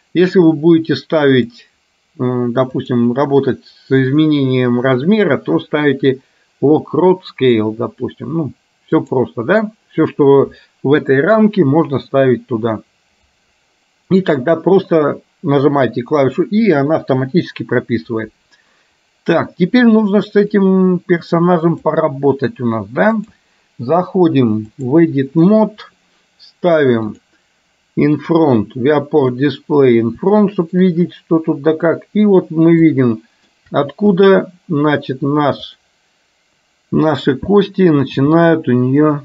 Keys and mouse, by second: 20.7-22.1 drag, 23.2-25.2 drag, 27.2 click, 30.5 shift+middle click, 33.0 shift+middle click, 34.2 click.